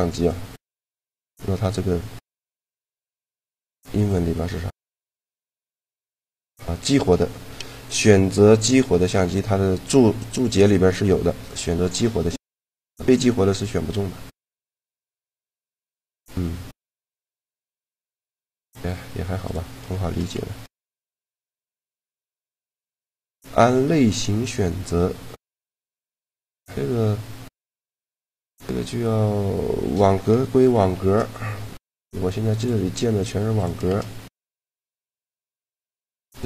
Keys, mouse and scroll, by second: 1.9-3.9 drag, 12.6-14.6 right drag, 14.3-16.1 drag, 18.3 a, 19.1 right click, 20.0 a, 21.8-23.5 drag, 29.5-30.7 drag, 30.7 shift+a, 33.0 g, 33.7 shift+a, 35.0 g, 35.8 shift+a.